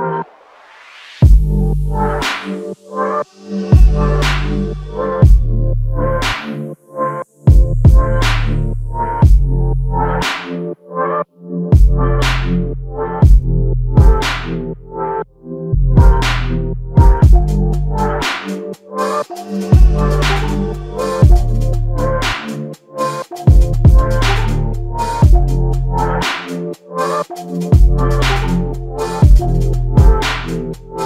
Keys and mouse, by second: 1.3 double click, 6.2 shift+click, 8.7 shift+click, 9.9 double click, 11.1 alt+click, 14.1 alt+click, 24.3 alt+click.